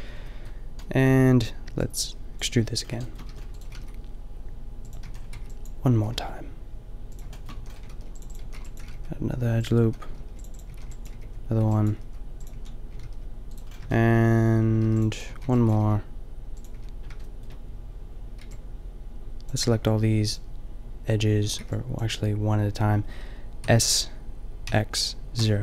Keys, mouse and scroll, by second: 2.3 b, 3.3 e, 3.7 g, 4.8 click, 5.0 a, 5.4 b, 6.0 g, 7.5 a, 7.8 ctrl+r, 8.3 a, 8.5 b, 8.8 g, 9.8-12.5 typing, 10.2 ctrl+r, 12.3 click, 13.0 ctrl+r, 13.7 a, 14.1 middle click, 14.9 ctrl+r, 15.2 a, 15.4 b, 15.6 g, 16.7 a, 18.4 b, 19.7 b, 21.4 a, 21.6 b, 23.6 s.